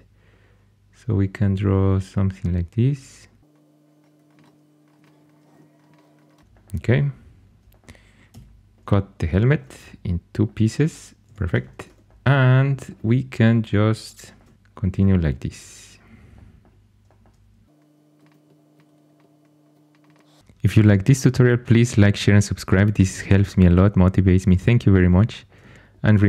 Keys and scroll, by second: 4.9-6.5 typing, 8.2 c, 11.2 2.